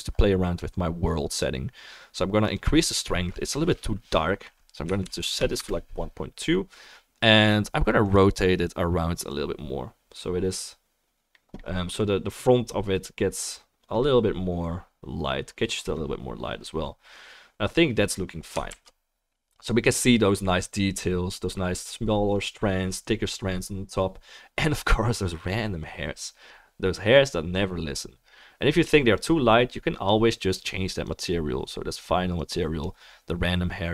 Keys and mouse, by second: 2.6-8.1 drag, 9.3-30.0 drag, 19.0 ctrl+s, 30.0-31.0 middle drag, 31.0 click, 31.1-32.4 middle drag, 32.4-33.9 drag.